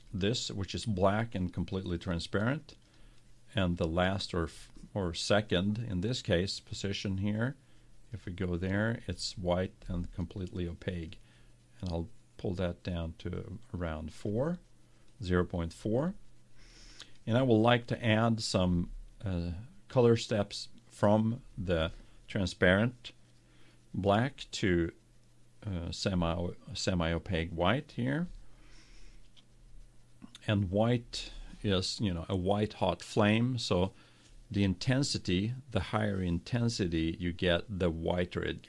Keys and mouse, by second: 0.1-2.1 drag, 8.0-11.0 drag.